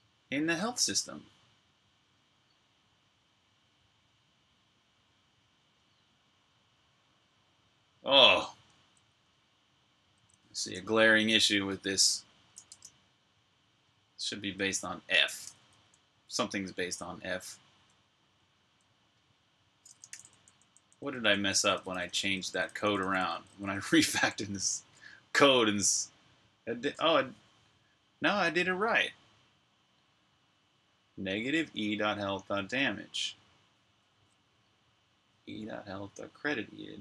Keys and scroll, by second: 11.5 super+Tab, 14.2 k, 15.2 typing, 17.3-18.5 typing, 19.6-23.9 typing.